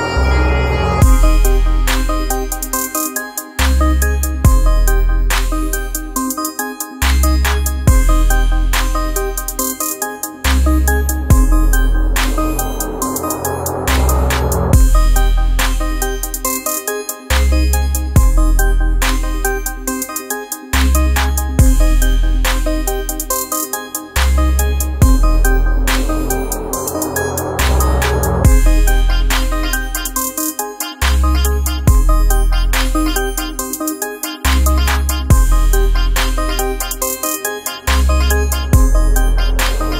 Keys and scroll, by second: 10.5 BackSpace, 11.6 alt+space, 19.3 space, 28.8 space.